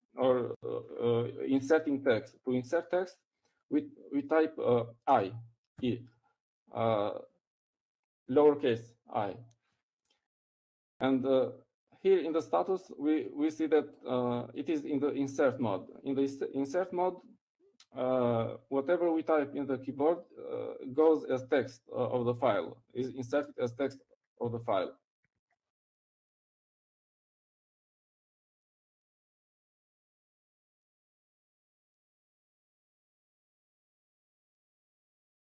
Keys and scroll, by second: 10.3 typing, 29.4-30.7 typing, 32.7-34.2 typing.